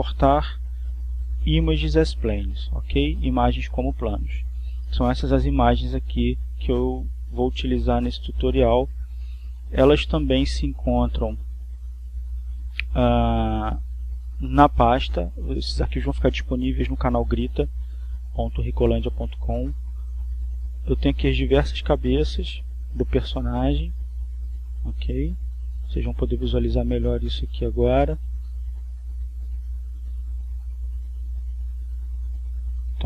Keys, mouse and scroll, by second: 9.4-10.9 drag, 11.4 click, 13.4 click, 21.6 click, 25.5 right click, 26.4 click, 29.2-30.2 drag, 30.4-33.0 drag.